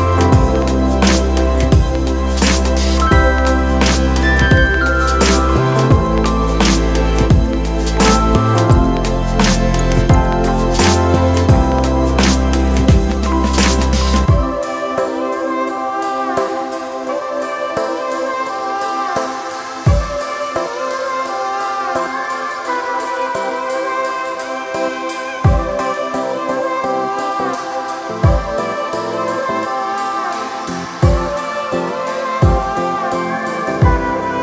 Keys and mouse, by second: 1.2-3.7 shift+drag, 3.8-5.9 shift+drag, 6.4-15.0 shift+drag, 15.0-22.7 shift+drag, 23.0-24.5 shift+drag, 24.9-33.2 shift+drag, 33.2-34.4 shift+drag.